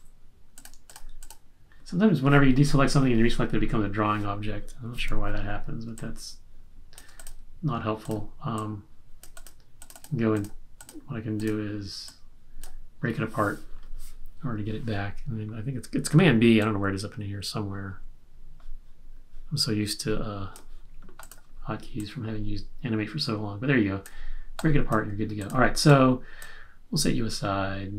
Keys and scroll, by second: 4.9 q.